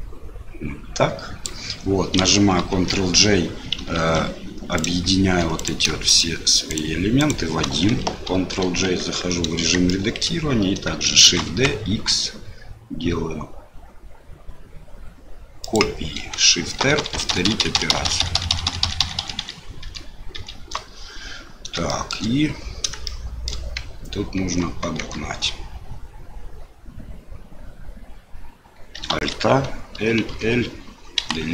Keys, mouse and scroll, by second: 2.7 ctrl+j, 4.0 ctrl+z, 4.7 click, 5.6 click, 6.0 shift+click, 6.7 shift+click, 7.2 shift+click, 8.3 ctrl+j, 9.0 Tab, 9.8 shift+click, 11.2 shift+d, 16.8-20.3 typing, 22.0 shift+middle click, 23.1 shift+click, 24.4 Tab, 25.0 Tab, 29.1 alt+a, 29.9 l, 30.2 l, 31.1 Delete.